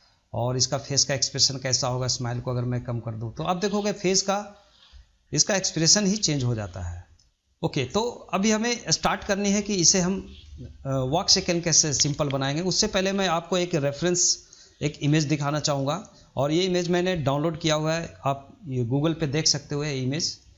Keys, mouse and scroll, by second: 0.1-0.6 drag, 0.6 scroll up 2, 0.8-2.0 middle drag, 2.0-3.6 drag, 3.6-5.2 middle drag, 5.2-5.6 scroll up 1, 5.6 shift+middle click, 6.3-7.1 scroll up 1, 7.1 scroll up 1, 7.3 middle click, 7.7 scroll down 1, 7.9-8.6 shift+middle drag, 8.6 scroll down 1, 8.8-9.7 shift+middle drag, 9.7 scroll down 2, 10.0-15.3 middle drag.